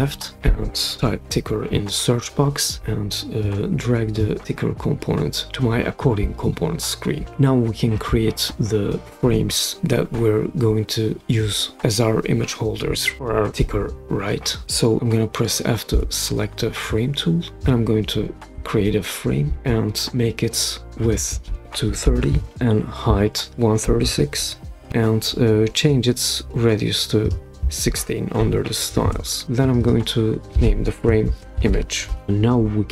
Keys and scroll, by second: 1.0 typing, 15.9 typing, 21.6-22.7 typing, 23.7-25.3 typing, 28.3-29.0 typing, 31.0-32.2 typing.